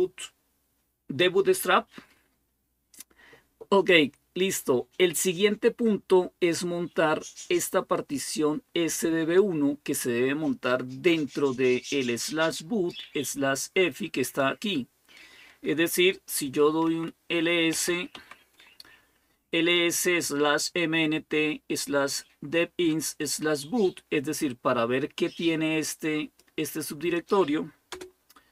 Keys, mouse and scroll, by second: 4.3 click, 7.7-10.8 drag, 11.3-16.6 drag, 17.3-18.2 typing, 25.1-27.7 drag, 27.7 Return.